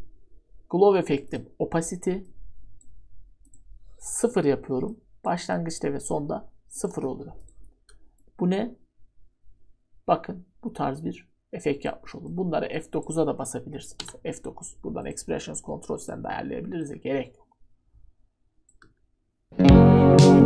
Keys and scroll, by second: 4.3 0, 6.9 0, 14.0 F9, 18.8 ctrl+d.